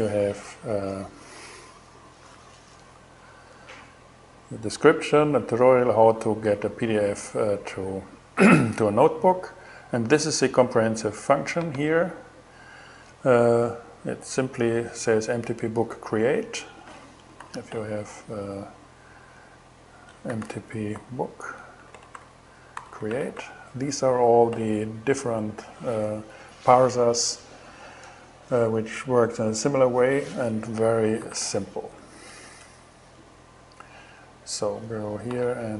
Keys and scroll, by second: 17.0 super+n, 19.6-23.6 typing, 30.8 alt+5, 30.9 alt+6, 31.6 alt+BackSpace, 32.9 alt+BackSpace, 34.9 alt+5, 35.0 alt+6, 35.7 alt+shift+6.